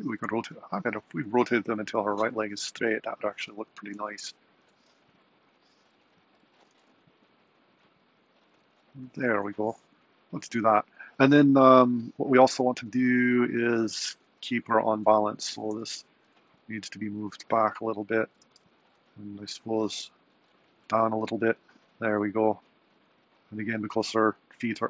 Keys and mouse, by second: 1.5 r, 5.0 r, 6.7 r, 14.1 super+Right, 15.1 click, 15.8 g, 18.5 g.